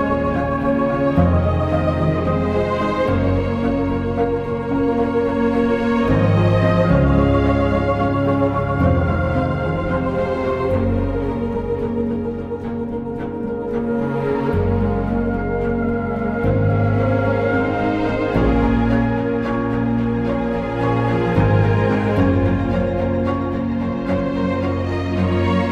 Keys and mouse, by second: 2.1 click, 2.1 k, 4.0 click, 4.8 click, 5.4 click, 6.8 click, 7.8 click, 10.4 click, 11.8 click, 14.1 click, 15.7 click, 17.6 click, 18.9 click, 20.2 click, 21.2 click, 22.3 click, 23.5 click, 24.8 click.